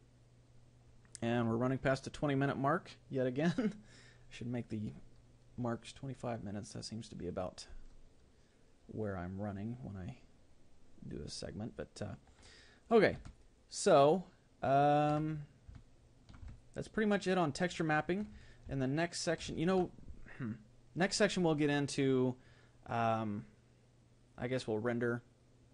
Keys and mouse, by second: 13.5-15.3 middle drag, 16.6-18.4 middle drag, 18.8-25.7 middle drag.